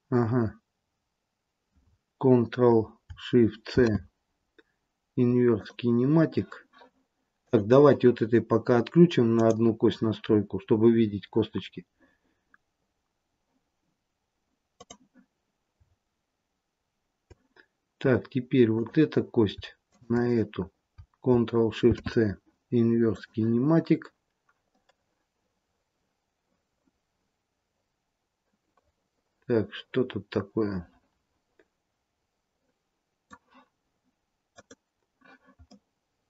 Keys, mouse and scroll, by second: 3.6 ctrl+shift+c, 7.3 click, 9.3 click, 11.4-12.3 scroll up 1, 14.7 click, 18.7 click, 19.8 shift+click, 21.8 ctrl+shift+c, 24.7 middle click, 34.5 click, 35.6 middle click.